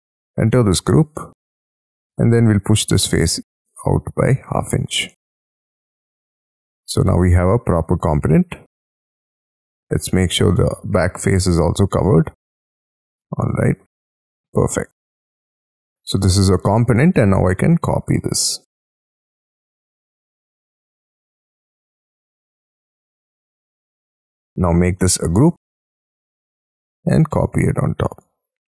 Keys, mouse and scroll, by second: 0.8 double click, 2.1 p, 3.9-6.0 typing, 6.2 Escape, 6.9 middle click, 8.0 double click, 8.7 j, 8.9 middle click, 9.9 middle click, 10.7 l, 12.4 e, 13.0 space, 13.5 middle click, 14.0-14.6 scroll down 8, 14.6 Escape, 15.2 middle click, 16.1 right click, 17.0 scroll up 2, 17.2 ,, 17.9 scroll up 4, 18.1 middle click, 18.5 m, 19.9-20.5 scroll down 8, 20.5 scroll up 2, 20.7 middle click, 21.2-21.6 scroll up 3, 22.3 shift+click, 22.5-23.0 scroll down 7, 22.8 space, 23.3 middle click, 24.2 ctrl+click, 25.0 g, 25.5 scroll up 5, 26.4-26.9 scroll up 4, 27.6-28.2 scroll down 3.